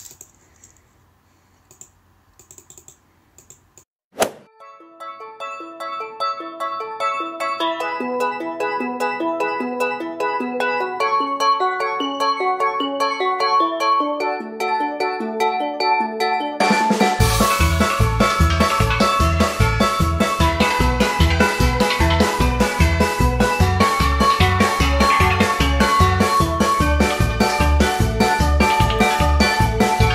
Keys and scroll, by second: 4.2 ctrl+alt+z, 8.4 space, 8.7 ], 9.4 space, 9.8 space, 10.9 space, 11.3 ], 13.5 space, 17.5 space, 18.0 [, 20.8 shift+space, 21.5 shift+space, 23.2 space, 25.3 space, 26.4 ], 26.8 alt+x, 27.2 space, 29.9 space.